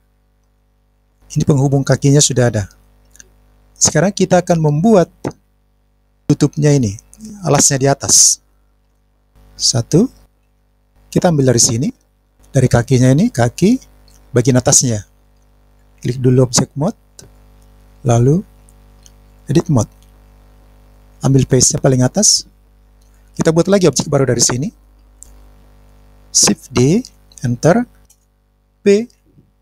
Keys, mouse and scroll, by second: 3.9 scroll up 1, 9.2 scroll up 1, 9.2 middle click, 10.3 KP_1, 10.7 middle click, 23.0 click, 26.8 shift+d.